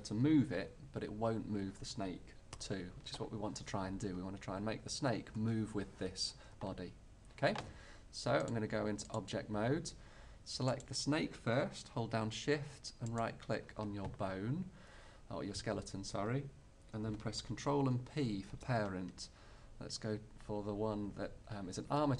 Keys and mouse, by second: 0.5 g, 8.5-10.5 drag, 10.8-12.7 drag, 13.2-15.0 drag, 15.0-17.9 right drag, 17.9 ctrl+p.